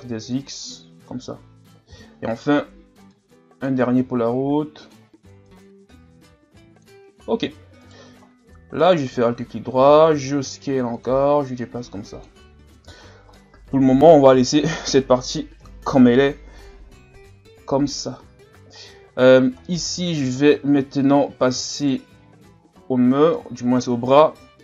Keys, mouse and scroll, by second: 1.9 e, 3.1 click, 4.0 s, 5.4-7.1 drag, 7.1-7.8 scroll down 1, 7.8 alt+right click, 8.8 alt+right click, 9.2 scroll up 2, 10.1 s, 11.6 click, 12.5 scroll down 2, 12.7 Tab, 13.0 scroll down 1, 13.3-15.6 middle drag, 15.6 KP_1, 17.2 scroll up 1, 17.9 scroll up 4, 18.5 scroll down 4, 18.8 scroll up 2, 19.3 scroll down 1, 19.7-20.4 middle drag, 20.4 Tab, 21.8 alt+right click, 23.4 KP_1.